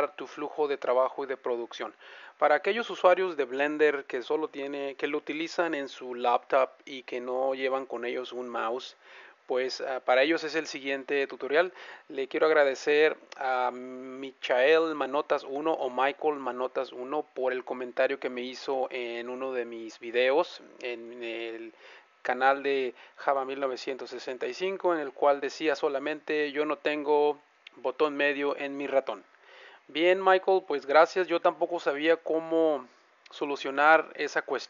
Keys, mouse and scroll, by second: 18.1-19.9 middle drag, 20.1-21.9 middle drag, 31.6-33.4 middle drag.